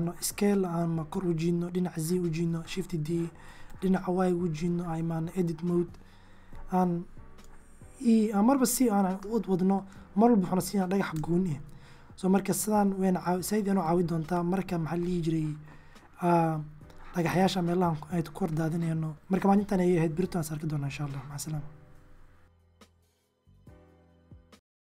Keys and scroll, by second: 0.3 z, 1.7-2.8 typing, 3.9 Tab, 6.6 e, 8.2 Tab, 10.3 x, 13.0 alt+g, 13.7 alt+s.